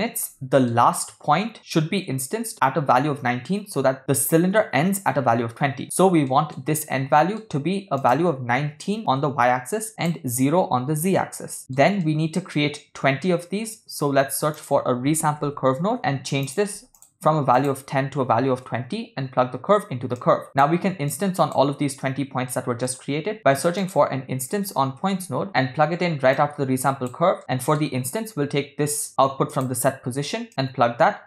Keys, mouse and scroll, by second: 0.3-0.7 shift+middle drag, 6.3 shift+middle click, 6.8 ctrl+middle click, 8.0-9.0 drag, 10.0-11.1 drag, 11.6 ctrl+middle click, 12.0 shift+middle click, 14.1 shift+a, 17.6-18.7 drag, 20.2-20.6 drag, 21.1 click, 22.5 middle click, 23.2 shift+a, 26.3 click, 27.4 middle click, 29.1 middle click, 29.5 click, 30.5-31.2 drag.